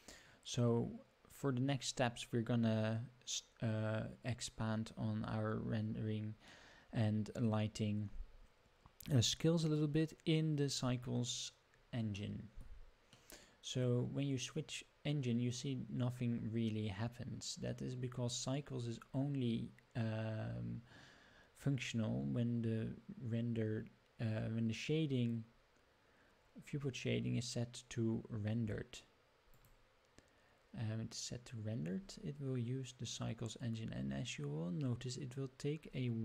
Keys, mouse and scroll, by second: 6.8-9.9 middle drag, 11.3-11.9 scroll down 2, 12.2-12.7 shift+middle drag, 13.1-13.9 middle drag, 29.6 click.